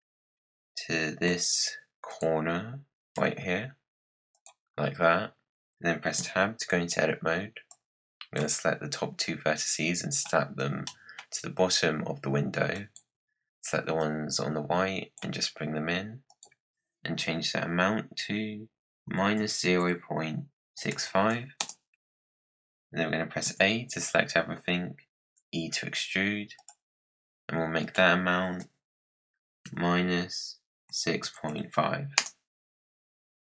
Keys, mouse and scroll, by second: 0.3-1.2 scroll down 2, 1.2 g, 3.1 g, 5.1-5.5 scroll down 3, 6.1 Tab, 7.6 click, 9.1 click, 10.8-12.6 middle drag, 12.6 click, 13.9 click, 16.2-18.9 drag, 23.4 a, 24.5-24.8 scroll down 8, 25.1 e, 27.7-30.8 drag, 33.0-33.5 drag.